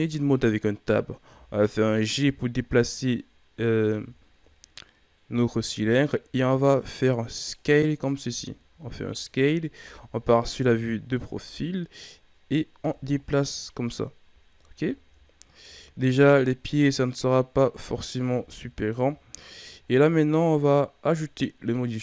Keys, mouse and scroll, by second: 1.3 g, 4.2-4.9 shift+scroll down 2, 4.9 scroll up 2, 5.7 s, 8.1 s, 9.7 KP_3, 11.5-12.8 drag, 12.8 KP_1, 14.3 a, 14.4 scroll down 1, 14.9-15.4 shift+scroll up 4, 15.6 Tab, 16.3-18.3 drag, 18.3 Tab, 19.4 shift+scroll down 4, 19.8-20.3 scroll up 1, 20.3 right click.